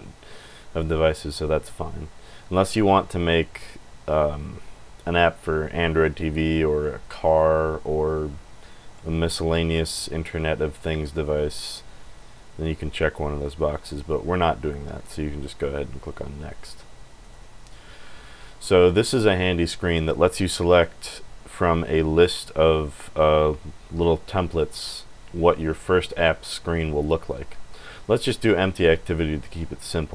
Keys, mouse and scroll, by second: 16.6 click, 17.2 click, 17.5 scroll down 2, 17.9 click, 20.7 click, 21.0 scroll down 1, 22.2-22.8 scroll down 4, 22.9 scroll up 2, 23.5-24.1 scroll down 4, 24.2 click, 25.0 click, 27.0-27.7 scroll down 4, 27.9 click, 29.7 scroll down 1.